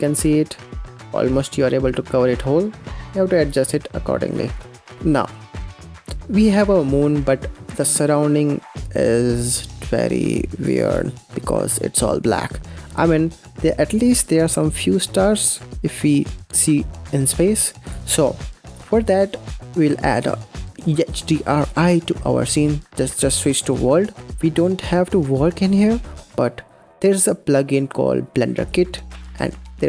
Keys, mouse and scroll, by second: 0.1 scroll up 4, 0.3 g, 2.7 g, 3.1 click, 3.8 click, 6.0 click, 6.4 scroll up 3, 6.9-9.0 scroll down 3, 10.5 click, 17.7 click, 20.0-20.4 scroll down 4, 20.4 middle click, 23.9 click, 24.0 scroll down 5, 24.3 middle click, 24.3-25.0 scroll up 11, 25.0 middle click, 25.4-25.9 scroll down 2, 25.9-28.5 middle drag, 28.5-29.8 drag.